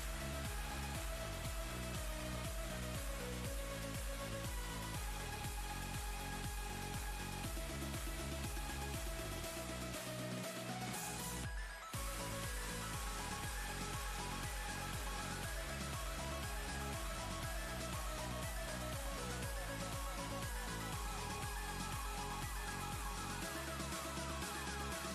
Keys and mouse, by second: 2.8-3.1 ctrl+click, 3.0 ctrl+space, 3.1 click, 3.3 click, 4.0 ctrl+z, 4.1 ctrl+click, 4.2 ctrl+space, 4.4 click, 5.0 ctrl+z, 5.1 click, 5.3 ctrl+space, 5.3 click, 5.5 ctrl+click, 5.5-5.8 ctrl+space, 5.9 click, 6.0 right click, 6.2 click, 6.4 ctrl+z, 6.4 click, 6.7 ctrl+space, 6.7-7.0 ctrl+click, 6.9 ctrl+space, 7.2 click, 7.8 ctrl+space, 7.8 ctrl+click, 7.8 ctrl+space, 8.0 click, 8.5 ctrl+click, 8.6 ctrl+space, 8.7 ctrl+z, 8.8 click, 9.7 click, 9.7-10.0 ctrl+space, 10.4 right click, 10.5-12.1 drag, 12.5 click, 13.8 ctrl+shift+[, 15.2 click, 16.2 click, 19.1 drag, 21.2 click, 21.5-21.9 click, 21.9 click, 22.6 ctrl+z, 23.5 click, 24.8 click.